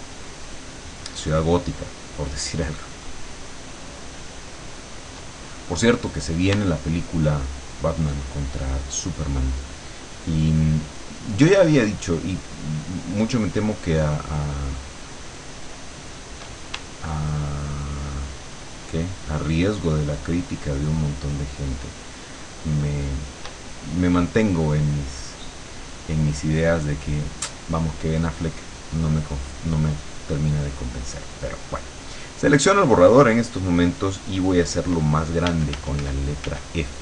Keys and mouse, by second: 7.9-16.4 shift+drag, 17.5-23.5 shift+drag, 29.2 click, 35.5 f.